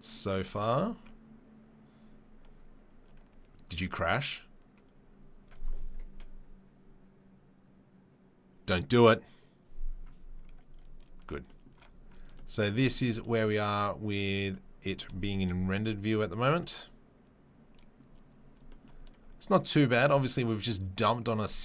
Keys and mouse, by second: 10.7 click, 10.8-14.0 middle drag, 14.0 click, 14.1-21.6 middle drag.